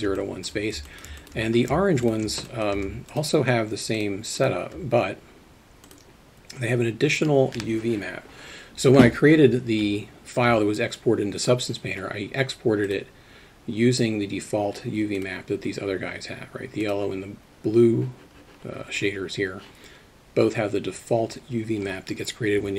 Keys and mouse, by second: 0.2 alt+middle click, 0.9 alt+middle click, 1.2 alt+shift+middle drag, 2.5 alt+shift+middle drag, 4.0 shift+click, 4.4 shift+click, 5.9 click, 12.9 click, 15.2 click, 16.8 click.